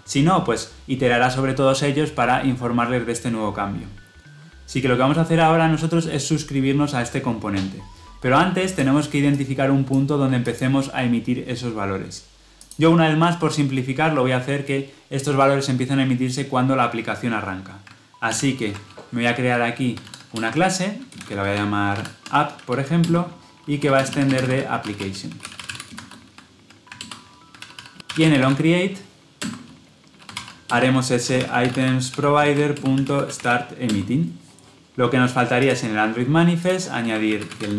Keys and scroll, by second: 18.3 alt+Insert, 26.9 alt+Return, 29.3 Return.